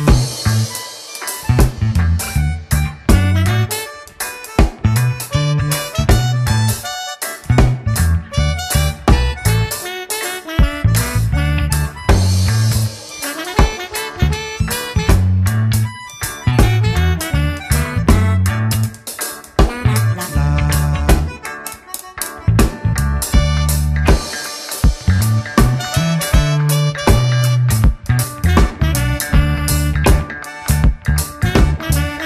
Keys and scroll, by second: 1.3 w, 4.4 space, 7.4 Return, 8.1 shift+F2, 8.8 ctrl+d, 8.9 space, 11.1 ctrl+w, 11.5 Return, 19.9 c, 20.5 alt+space, 20.8 c, 22.9 Escape, 23.3 space, 26.9 Return, 27.5 ctrl+space, 28.1 shift+F2, 28.5 space, 29.1 ctrl+g, 31.3 ctrl+space, 31.7 Return.